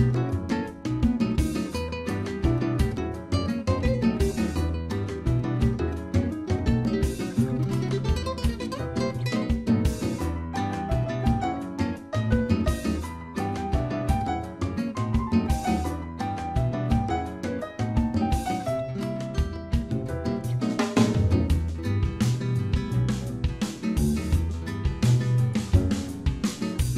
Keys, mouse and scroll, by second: 0.8 click, 1.7 shift+s, 2.8 middle click, 4.4 Tab, 5.3 Tab, 6.1 s, 8.1 shift+middle click, 9.7 click, 13.6 middle click, 13.9 scroll up 4, 14.5 middle click, 15.7 s, 16.7 middle click, 17.2 scroll down 4, 17.6 s, 18.7 scroll down 1, 18.8 middle click, 19.3-19.6 scroll down 1, 19.6 s, 22.2 middle click, 22.9-23.2 scroll up 5, 23.2 middle click, 24.5 s.